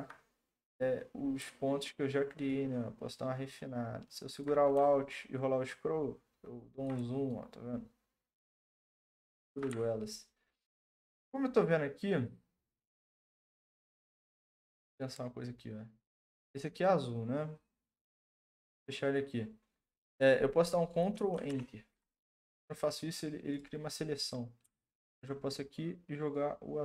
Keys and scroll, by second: 21.5 ctrl+Return.